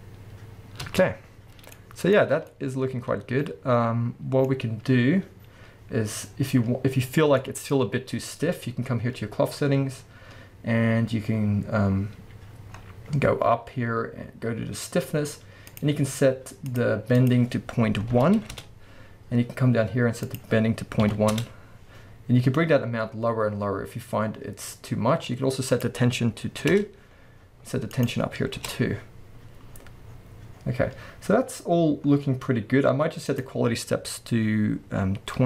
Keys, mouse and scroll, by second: 1.5 scroll down 2, 2.2-2.5 scroll up 2, 4.5-6.3 scroll up 2, 6.3-7.4 scroll down 2, 10.0-11.4 scroll down 2, 11.4-15.7 scroll up 2, 15.7-16.8 drag, 17.2-35.4 drag, 18.6 Return, 21.4 Return, 24.7-25.7 scroll down 1, 26.8 Return, 28.7 Return, 29.7-32.0 scroll down 1, 32.0 scroll up 1, 32.3-33.0 scroll down 1.